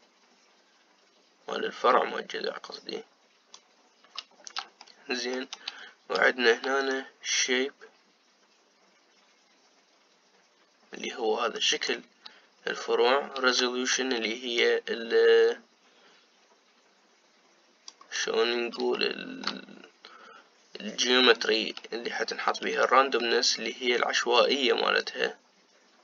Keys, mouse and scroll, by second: 5.5-7.6 shift+middle drag, 7.6-10.8 shift+drag, 15.3-19.6 shift+drag, 19.6-22.7 shift+middle drag, 23.5-26.0 shift+drag.